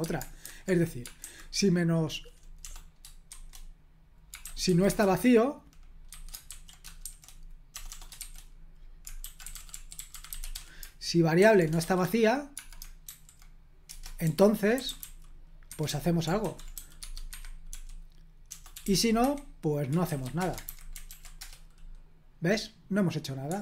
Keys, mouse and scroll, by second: 0.0-1.2 typing, 2.6-13.0 typing, 13.8 Return, 14.2-16.4 typing, 15.7 Escape, 17.0 Tab, 17.3 Escape, 17.7-20.5 typing, 20.6 super+h, 21.0 ctrl+p, 21.4 Return.